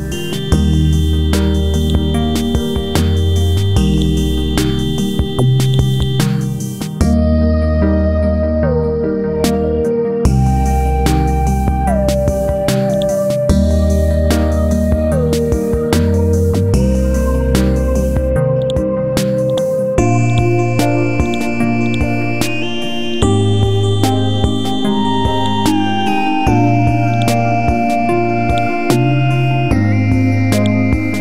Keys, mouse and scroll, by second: 1.8 click, 5.9 right click, 6.9 F12, 7.3 Tab, 7.7 KP_2, 7.9 Tab, 9.5 ctrl+v, 11.1 scroll up 1, 12.0 scroll down 1, 12.9 click, 13.5 scroll up 1, 15.8 scroll down 1, 17.6-18.6 scroll up 1, 18.6 click, 20.3 right click, 21.2 click, 23.1 right click, 23.5 scroll up 1, 24.2 scroll down 1, 24.8 scroll up 1, 25.4 click, 26.0 F5, 26.4 Delete, 27.1 click, 27.5 scroll up 1, 28.5 shift+click, 29.9-30.3 typing, 30.6 click.